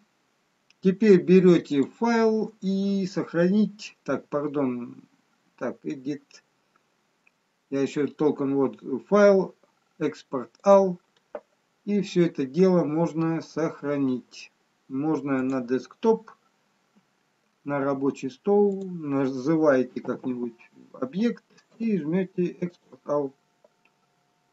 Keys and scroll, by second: 20.0 4.